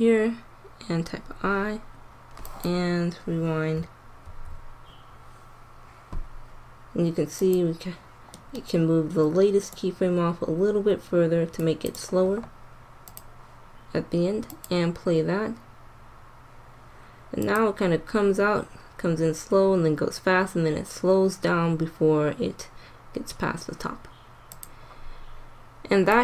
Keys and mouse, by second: 0.9 i, 2.4-4.3 drag, 4.3 alt+a, 7.3 click, 7.8-11.6 drag, 13.0-16.3 drag, 17.5-19.0 drag, 24.6 click.